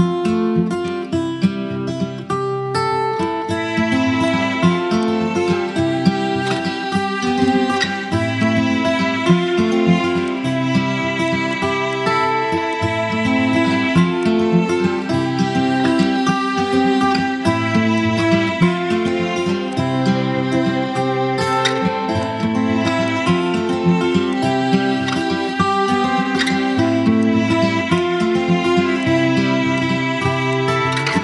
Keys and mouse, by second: 0.5 click, 2.9-6.8 drag, 10.8 space, 10.9 click, 11.3-12.2 space, 11.7 click, 11.8 space, 12.4-13.0 click, 13.4 ctrl+z, 13.9 click, 15.7-17.2 click, 18.6 space, 18.7-19.3 click, 19.1 space, 19.4-20.0 drag, 21.0 space, 21.2-21.8 click, 21.5 space, 21.9-22.5 drag, 26.8 space, 26.9-27.5 click, 27.5 space, 27.6-28.6 drag, 29.3 space, 29.5-30.1 click, 30.1 space, 30.2 click, 30.4 space, 30.7 click, 30.8 space.